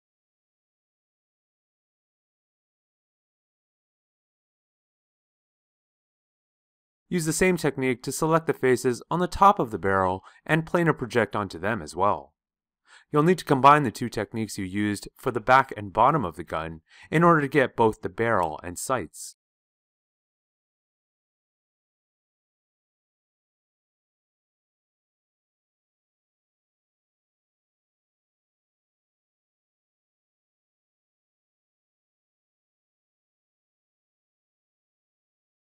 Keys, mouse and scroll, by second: 18.5-21.6 ctrl+drag, 22.5 shift+click, 23.3-27.7 drag.